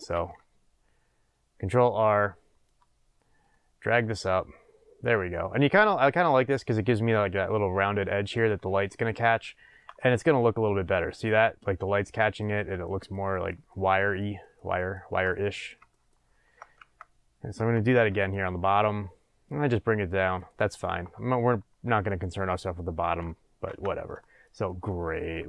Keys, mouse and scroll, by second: 0.1 ctrl+r, 8.4 click, 9.7 Tab, 10.9-20.5 middle drag, 15.2 scroll down 2, 16.8 Tab, 17.9 ctrl+r, 20.5 click, 22.1 click, 23.6 Tab, 24.2-25.4 shift+middle drag.